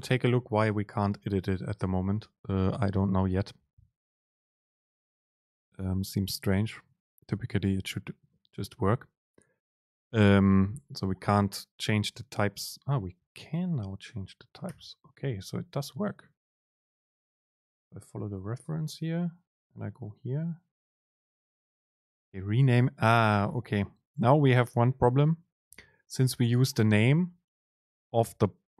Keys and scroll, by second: 0.6 Up, 0.8 Down, 12.2 super+space, 16.2 Down, 16.3 super+space.